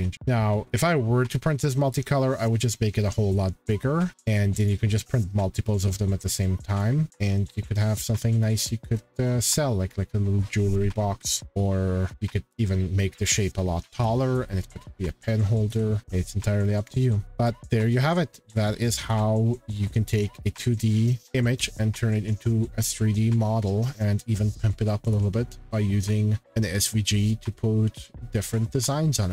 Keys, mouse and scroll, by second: 0.1 middle click, 0.3-0.8 scroll, 1.2 scroll, 4.6 click, 5.2 click, 6.8 click, 8.6 click, 8.9 scroll, 9.9 click, 12.0 scroll, 15.7 scroll, 16.8 click, 17.4 click, 19.0-19.5 shift+scroll, 20.2 click, 21.2 shift+scroll, 23.5 shift+middle click, 25.1 shift+middle click, 26.4-26.7 scroll, 27.1 shift+middle click.